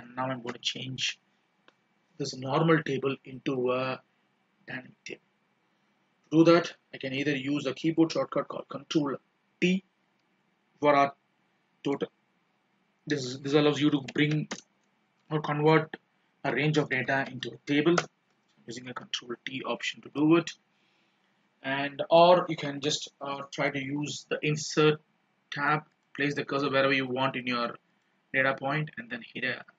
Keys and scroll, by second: 19.7 ctrl+b.